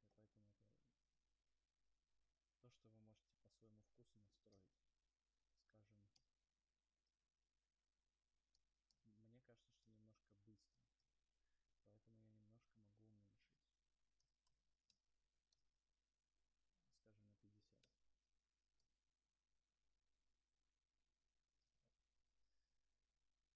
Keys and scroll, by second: 9.1 0, 16.5 Right, 17.1 BackSpace, 17.7 Return, 18.4 BackSpace, 20.8 0.